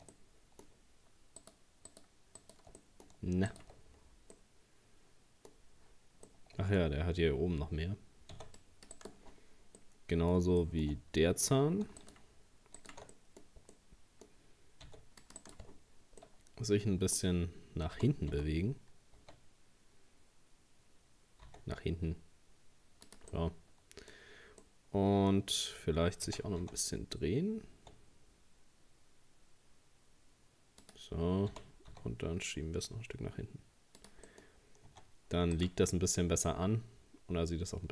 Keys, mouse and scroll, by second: 0.1-1.4 middle drag, 1.4 shift+right click, 1.9 shift+right click, 2.4 shift+right click, 2.8 middle click, 3.5 shift+right click, 3.9-4.3 scroll down 2, 4.3-5.6 middle drag, 5.6-5.9 scroll up 1, 6.2 scroll up 3, 6.3 shift+middle click, 7.0-8.3 scroll up 2, 8.3 c, 9.3-9.8 scroll down 4, 9.8-11.0 middle drag, 11.0 scroll up 1, 12.0 alt+shift+right click, 12.8 alt+shift+right click, 13.1-14.9 middle drag, 14.9 c, 15.7-16.2 scroll down 2, 16.2-18.0 middle drag, 18.0 g, 23.3 middle click, 24.2-24.6 scroll up 2, 24.6-26.3 middle drag, 26.3 r, 31.5 g, 34.3 middle click, 34.5-34.9 scroll down 1, 34.9 Tab, 35.6 right click, 35.9-37.9 middle drag.